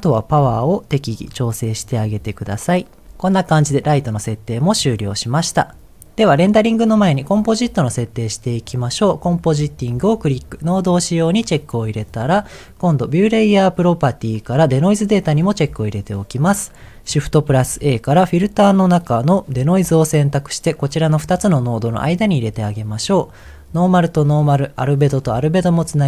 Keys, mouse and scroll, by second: 0.3-3.0 shift+drag, 3.0 ctrl+s, 11.2 click, 12.0 scroll down 2, 12.3 middle click, 13.7-14.8 drag, 14.9-16.0 drag, 16.5 click, 17.5 shift+a, 22.4 middle click, 23.7 click, 24.9-26.0 drag.